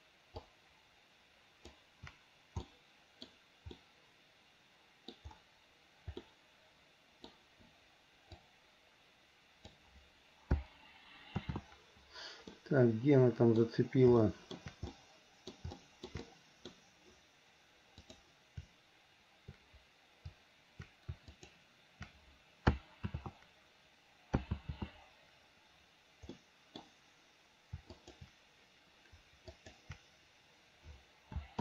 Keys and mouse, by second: 0.5-2.0 ctrl+drag, 2.8 middle click, 4.0-5.4 middle drag, 6.4-7.5 middle drag, 8.5-9.9 drag, 11.7 ctrl+z, 12.7-13.9 middle drag, 14.4 shift+middle click, 15.1 middle click, 15.9 shift+middle click, 16.4 click, 16.4 right click, 18.3 click, 23.3 ctrl+z, 24.7 ctrl+z, 26.7 click, 28.1 shift+click.